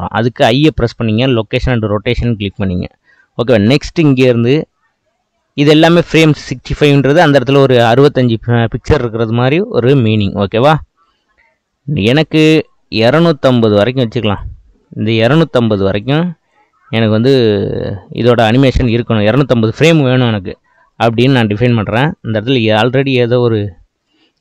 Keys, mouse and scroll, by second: 4.0-7.1 drag, 10.0-13.2 drag, 16.1-19.1 drag, 23.0 click, 24.0 Delete.